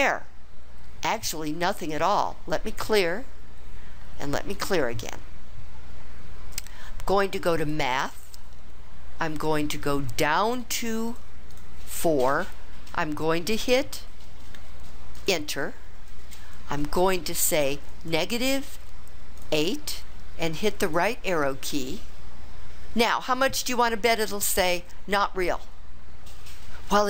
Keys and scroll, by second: 10.6 Down, 11.1 Down, 11.5 Down, 15.2 Return, 19.4 8, 20.9 Right.